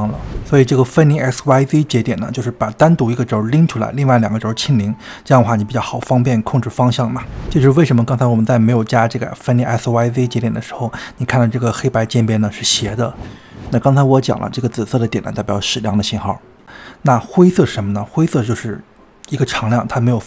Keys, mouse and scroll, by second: 0.0-2.1 drag, 4.0-4.4 scroll down 2, 4.4 middle click, 5.2-6.3 drag, 6.3 space, 6.6 space, 7.3 click, 8.1 click, 8.9 ctrl+x, 13.8 scroll up 2, 18.5-20.2 middle drag.